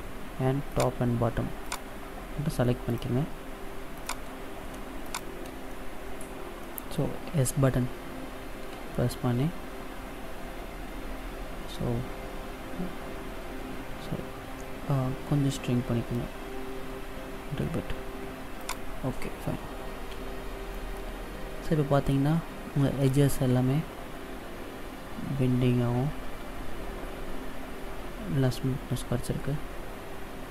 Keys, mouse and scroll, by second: 0.7 shift+right click, 1.7 shift+right click, 2.9 shift+right click, 4.0 shift+right click, 4.6 shift+right click, 5.1 shift+right click, 5.7 middle click, 8.8 s, 20.1 a, 20.7 middle click, 22.5-22.8 scroll up 2, 23.1 middle click.